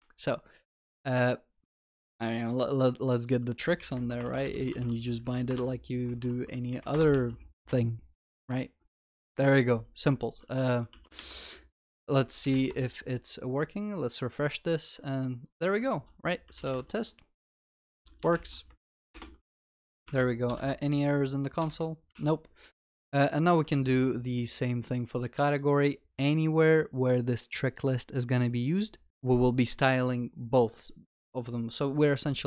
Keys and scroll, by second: 5.5 Return, 7.2 ctrl+s, 23.7 ctrl+c.